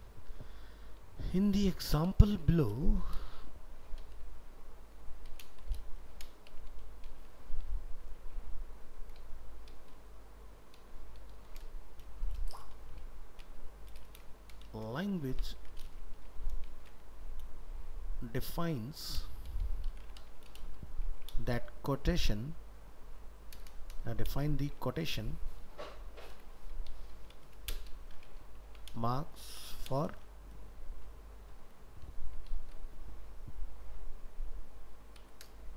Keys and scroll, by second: 2.1 ctrl+shift+Right, 14.6 ctrl+shift+Left, 15.6 ctrl+x, 35.6 ctrl+v.